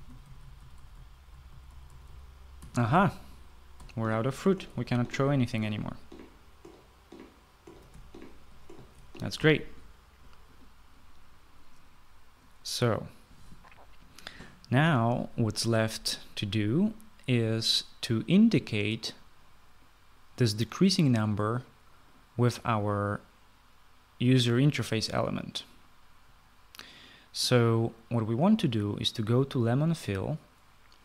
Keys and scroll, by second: 0.0-10.2 typing, 10.3 Escape.